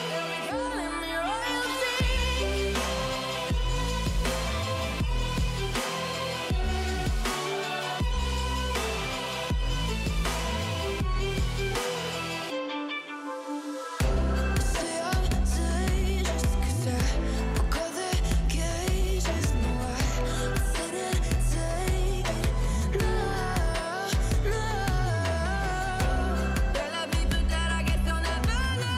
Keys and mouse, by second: 1.8 KP_1, 2.3 middle click, 2.9 shift+a, 5.0-6.0 right drag, 15.8 middle click, 16.3 middle click, 17.0 s, 18.1 z, 18.2 z, 18.2 z, 18.4 middle drag, 19.1 KP_1, 19.7 middle click, 20.9 shift+middle click, 21.5-21.9 middle drag, 22.8 click, 24.9-26.2 drag, 27.9-28.5 middle drag.